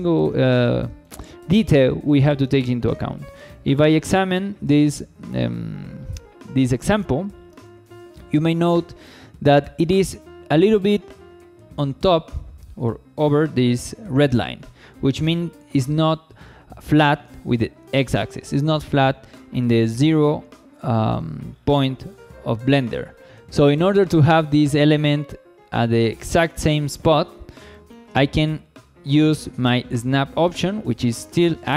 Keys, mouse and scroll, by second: 0.0 shift+middle drag, 0.5 scroll up 1, 0.8 shift+middle drag, 1.9 shift+middle click, 2.3 scroll up 1, 2.6 shift+middle drag, 3.1 scroll up 2, 3.5 shift+middle drag, 4.0 click, 6.3 z, 7.3-7.7 scroll up 2, 7.7 shift+middle drag, 8.1-8.9 scroll up 3, 8.9 shift+middle drag, 14.5-17.0 scroll down 8, 17.0-17.8 scroll down 3, 17.9 shift+middle click, 20.2-20.6 scroll up 1, 20.7 shift+middle drag, 21.5 scroll up 2, 22.0 click, 25.8 scroll up 1, 26.1 shift+middle drag, 27.3-27.6 scroll down 1, 27.7 shift+middle click.